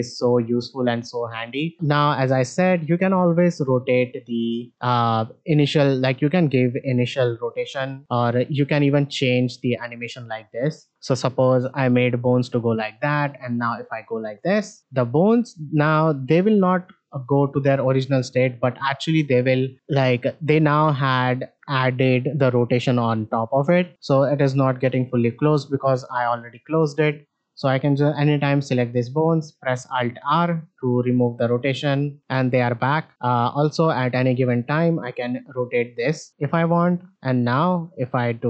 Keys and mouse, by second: 2.5 shift+middle click, 4.6 click, 7.0-8.0 drag, 8.0 r, 9.3 click, 9.8 r, 11.4-12.7 drag, 12.9-16.6 drag, 17.0 shift+middle drag, 20.2 click, 27.6-28.4 drag, 30.1 alt+r, 31.2 shift+middle drag, 33.7 click, 37.6-38.4 drag.